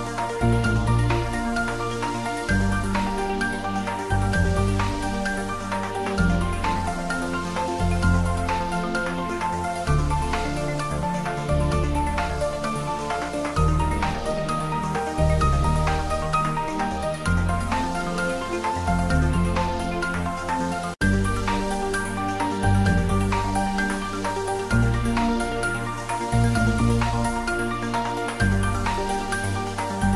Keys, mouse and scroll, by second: 1.0 click, 2.2 g, 2.6 z, 3.4 Up, 4.8 space, 5.0 g, 5.1 y, 5.3 Left, 9.2 shift+d, 9.5 y, 9.6 Right, 11.2 Right, 13.0 g, 13.1 y, 13.3 Left, 16.1 space, 16.8 shift+d, 17.0 y, 17.1 Right, 23.4 space, 24.5 click, 25.0 scroll down 1, 25.4 middle click, 26.2 scroll up 1, 27.7-28.2 scroll down 1, 28.7 click.